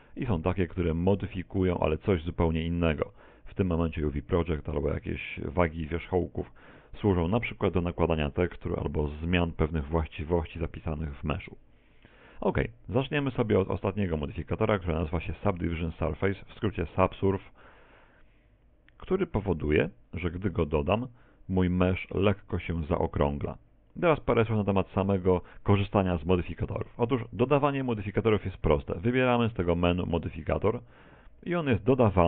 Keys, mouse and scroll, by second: 30.1 click.